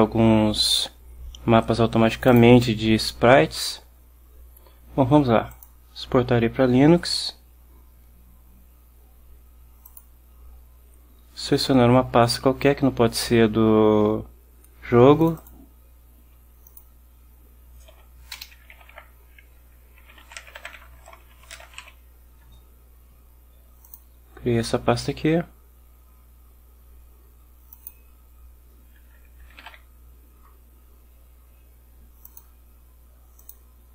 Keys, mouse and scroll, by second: 2.4 click, 4.0 click, 5.6 click, 10.0 click, 15.3 click, 16.8 click, 18.0-22.4 typing, 24.0 click, 27.8 click, 29.3-30.2 typing, 32.4 click, 33.5 click.